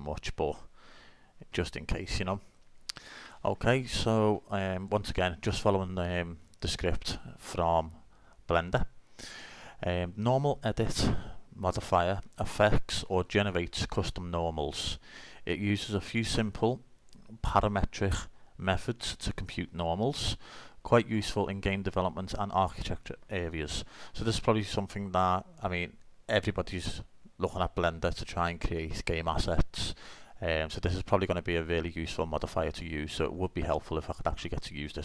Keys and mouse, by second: 1.0 n.